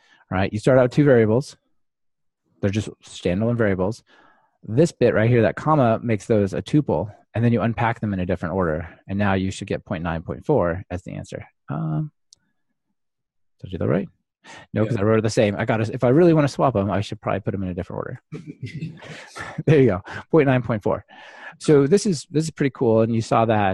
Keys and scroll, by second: 1.3 ctrl+alt+shift+Right, 6.2 ctrl+alt+shift+Right, 10.2 ctrl+r, 16.4 super+z, 16.9 Delete, 19.0 ctrl+r.